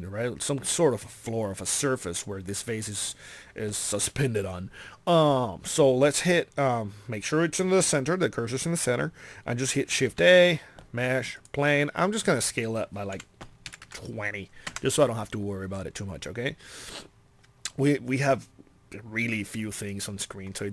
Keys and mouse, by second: 10.1 shift+a, 13.1 s, 17.7 middle click, 19.8-20.7 middle drag.